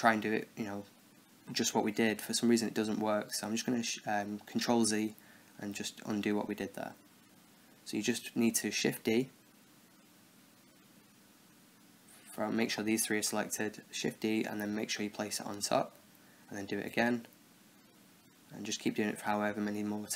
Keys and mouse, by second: 3.2-6.0 middle drag, 6.6 ctrl+z, 7.1 ctrl+z, 7.7 ctrl+z, 11.5-13.7 middle drag, 13.1 shift+d, 16.8 shift+d.